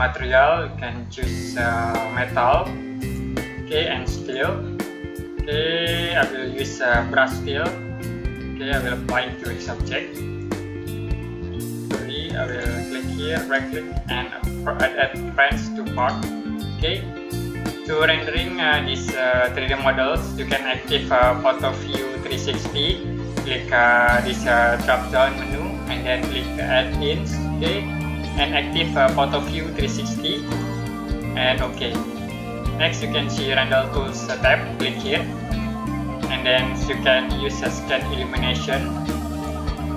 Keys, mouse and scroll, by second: 0.4-1.3 scroll down 1, 1.3-2.2 scroll up 1, 2.8 click, 7.9 click, 12.3 click, 13.2 right click, 15.8 click, 24.9 click, 30.3 click, 34.8 click, 39.5 click.